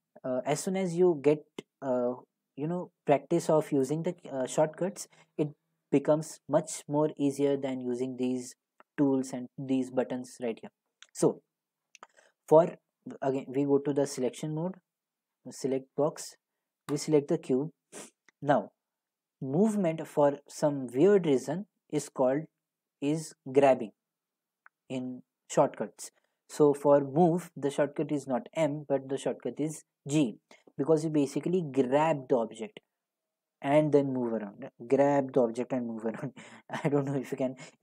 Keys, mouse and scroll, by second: 13.5 click, 17.0 click.